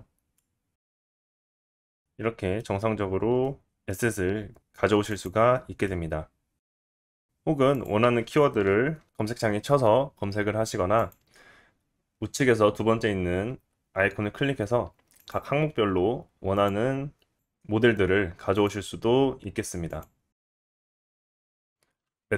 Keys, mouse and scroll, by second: 0.0 click, 0.4 shift+a, 1.4-2.8 drag, 1.5 middle click, 1.5 scroll up 2, 2.2 middle click, 2.8 middle click, 2.8 click, 2.9-5.8 middle drag, 2.9 scroll up 2, 5.8 click, 6.0-6.7 middle drag, 6.7 right drag, 6.9 middle click, 7.0 right click, 7.1-21.7 middle drag, 7.5-22.1 drag, 7.5-21.7 right drag, 22.1 right click, 22.1 click.